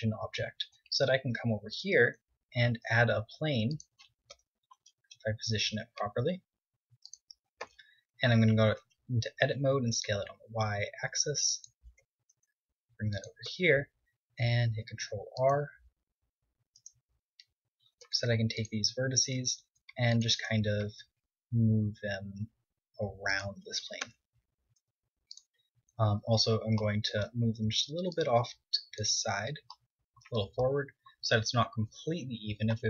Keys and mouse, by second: 0.1 shift+a, 0.6 drag, 2.3 g, 3.7 KP_7, 5.3 g, 7.1 Tab, 7.4 s, 11.0-12.9 drag, 11.5 Tab, 11.8 g, 12.9 Tab, 14.2 ctrl+r, 14.6-16.3 middle drag, 16.3 click, 16.7 KP_1, 17.4 ctrl+Tab, 18.7 a, 19.1 c, 20.5 g, 22.7 click, 23.4 Tab, 23.9-24.6 drag, 24.2 r, 24.7-25.4 drag, 25.4 Tab, 27.8 click, 29.5 Tab, 31.2 KP_7, 32.7 KP_1.